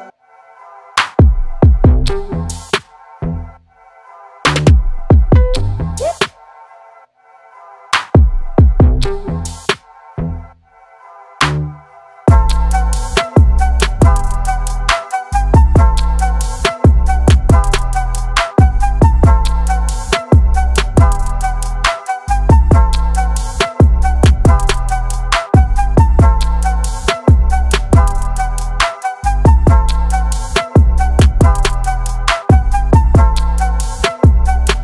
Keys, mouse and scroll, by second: 0.5 Down, 1.5 click, 6.6 click, 10.2 click, 14.3 click, 15.3 Tab, 15.9 shift+Tab, 17.3 click, 22.4 Tab, 23.4 click, 26.7 click, 28.6 click, 30.4 click, 31.0 click, 31.5 v, 31.8 click.